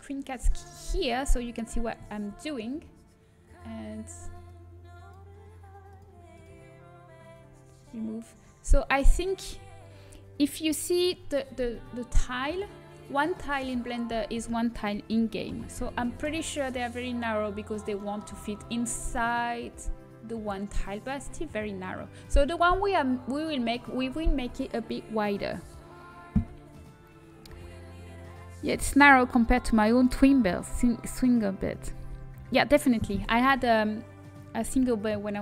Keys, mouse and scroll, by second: 3.1 middle click, 4.4-7.1 drag, 7.1 middle click, 7.4 click, 8.1-11.6 middle drag, 16.1 g, 18.7 middle click.